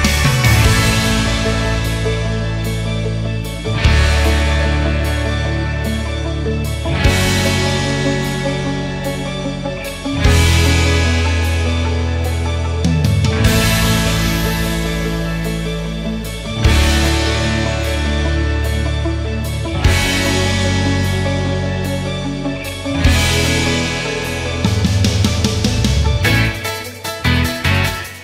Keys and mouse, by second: 8.2 ctrl+shift+click, 13.0 drag, 13.4 click, 18.8 click, 19.8 ctrl+shift+click, 25.0 click.